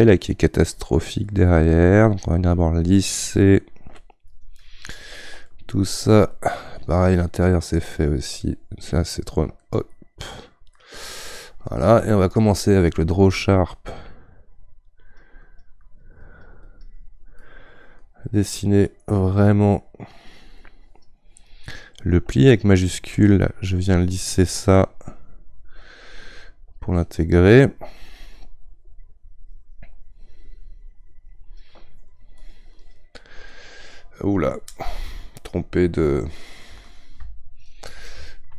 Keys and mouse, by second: 0.5-3.1 shift+drag, 3.1-4.3 middle drag, 4.3 shift+click, 4.6 shift+click, 5.5-10.7 shift+middle drag, 10.7-17.4 drag, 17.4 middle click, 18.3-25.6 drag, 32.0-37.2 drag, 37.2 ctrl+z.